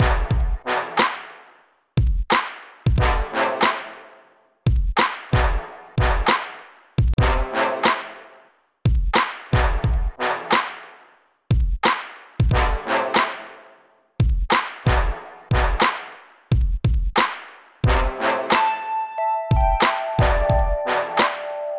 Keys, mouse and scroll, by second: 8.4 click, 12.0 click, 14.2 click, 14.4 right click, 14.6 double right click, 15.4 click, 15.6 click, 15.9 click, 16.0 double click, 16.3 middle click, 20.7 click, 20.8 click, 21.0 right click, 21.2 double right click.